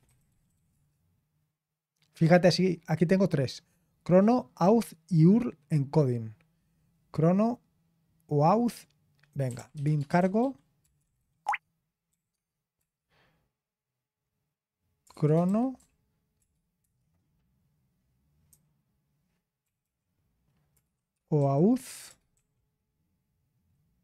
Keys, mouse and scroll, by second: 0.0-1.2 typing, 12.3-12.7 typing, 14.8-16.8 typing, 18.2-22.5 typing.